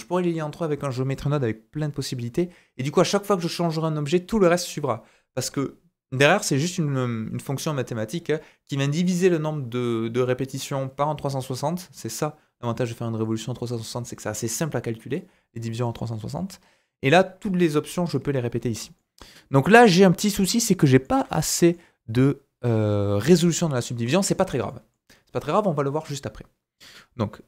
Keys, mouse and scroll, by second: 16.0 middle click, 18.7 scroll up 2, 18.9-20.9 middle drag, 24.0 scroll down 2, 24.3 shift+middle click, 25.0-26.7 scroll up 2.